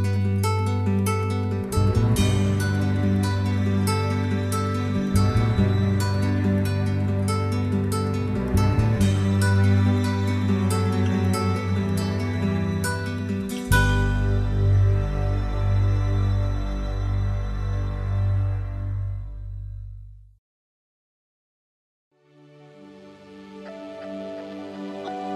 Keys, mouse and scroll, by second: 0.0 KP_7, 6.9 KP_3, 7.8 KP_1, 11.8 s, 14.7 s, 20.1 r, 24.1 s.